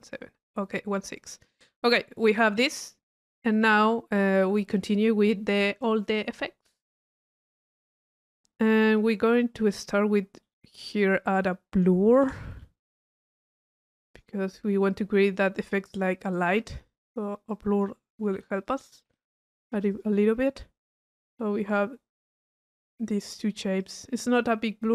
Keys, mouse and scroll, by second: 1.3 click, 2.2 click, 5.0 click, 9.2-10.4 middle drag, 10.4 right click, 10.9 right click, 11.8 click, 12.4 click, 13.1 u, 14.1 click, 15.3 click, 16.3 click, 17.5-17.8 drag, 18.7 drag, 20.4-22.0 middle drag, 22.3 click, 22.9 middle click, 23.8 click.